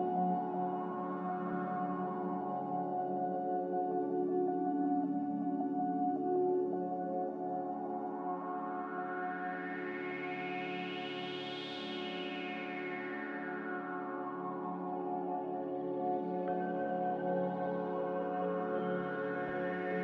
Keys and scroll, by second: 8.8 z, 15.5 Escape, 16.3 n.